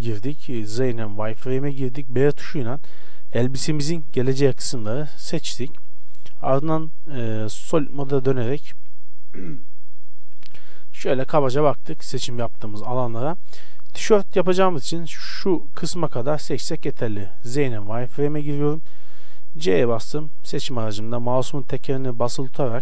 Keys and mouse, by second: 0.8 z, 1.7 b, 5.9 z, 9.1 middle click, 10.6-12.5 middle drag, 13.6 KP_1, 16.7 z, 19.6 c.